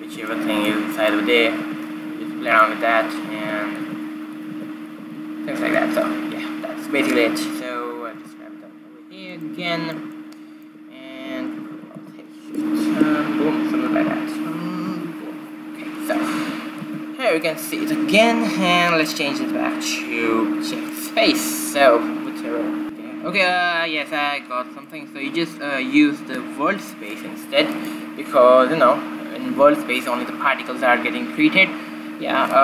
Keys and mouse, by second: 1.6-2.9 right drag, 2.3 g, 4.1 alt+a, 4.6 alt+a, 5.2 alt+a, 5.7 alt+a, 8.8 g, 10.4 middle click, 12.3 alt+a, 12.7 alt+a, 13.6 shift+Left, 14.6 alt+a, 15.6 alt+a, 17.1 alt+a, 17.8 alt+a, 19.7 click, 21.1 click, 23.3 q, 25.6-27.5 drag, 28.6-30.3 right drag.